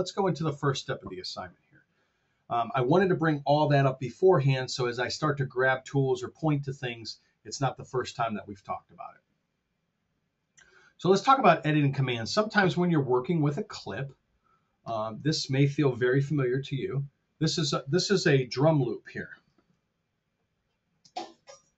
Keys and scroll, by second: 0.0 super+Tab, 12.3 super+Tab, 20.9 space.